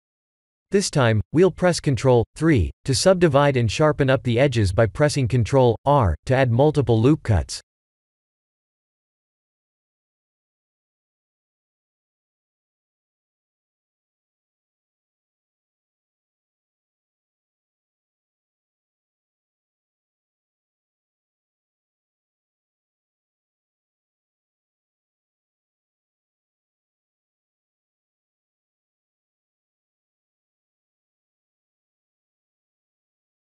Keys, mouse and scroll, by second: 1.9 ctrl+3, 2.5 middle click, 3.0 Tab, 3.4 ctrl+3, 4.0 middle click, 4.6 Tab, 5.5 middle click, 5.6 scroll up 1, 5.9 middle click, 6.8 scroll up 1, 7.3 middle click, 7.4-8.3 scroll down 2, 8.3 middle click, 8.3 scroll down 1, 9.2 ctrl+r, 15.6 ctrl+r, 18.0-18.6 scroll down 1, 18.6 middle click, 18.7 shift+z, 19.7 shift+z, 20.3 ctrl+r, 25.7 middle click, 26.6 ctrl+r, 30.8 click, 32.5 click.